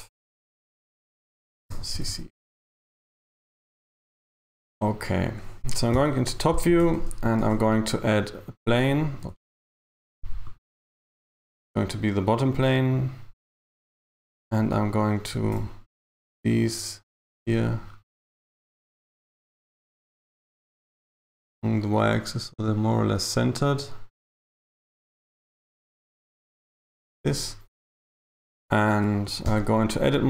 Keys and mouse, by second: 1.9 BackSpace, 2.1 BackSpace, 6.4 KP_7, 7.5 a, 9.4 shift+a, 14.1 right click, 15.5 g, 20.5 g, 25.2 g, 28.3 right click.